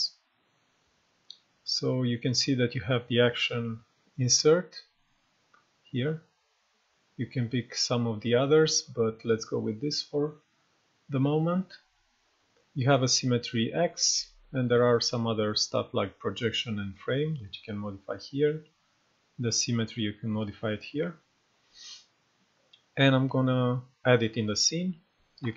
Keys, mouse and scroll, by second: 5.5-9.6 drag, 21.5-25.5 drag, 25.4 y.